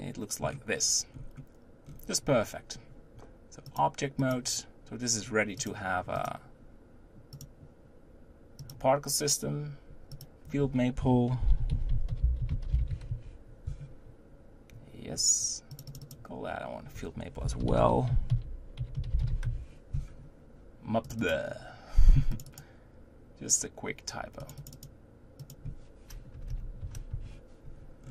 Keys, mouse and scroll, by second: 1.1-1.4 scroll up 4, 1.8-3.7 scroll down 4, 3.7-5.9 drag, 6.1 click, 7.3 click, 8.6 click, 10.1-13.1 drag, 16.0-19.1 drag, 21.4 click, 22.7 click, 24.7-26.5 drag, 26.5 BackSpace, 28.0-28.1 scroll down 10.